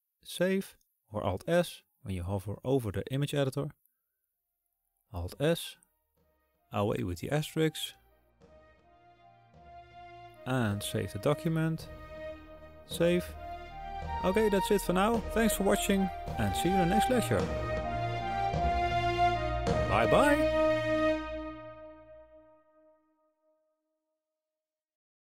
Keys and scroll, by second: 4.5 alt+s.